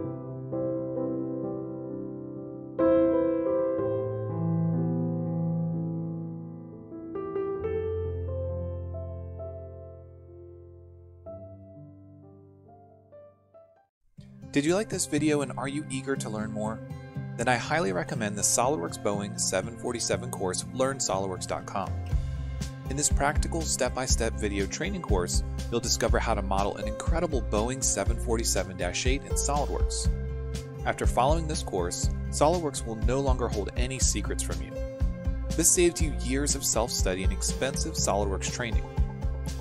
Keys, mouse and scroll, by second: 3.8 ctrl+7.